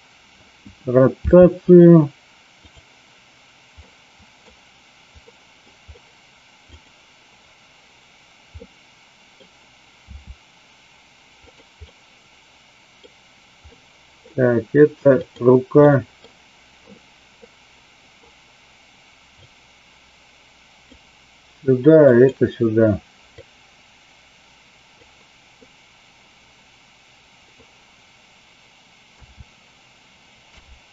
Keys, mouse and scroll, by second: 2.7 click, 3.8-4.4 middle drag, 5.3 middle click, 6.7 click, 8.6 middle click, 11.3 click, 11.8-12.9 middle drag, 13.7-14.2 middle drag, 15.7 middle click, 17.4 middle click, 19.3-20.9 drag, 22.1 click, 23.4-24.9 drag, 25.6-27.6 middle drag, 30.3 i.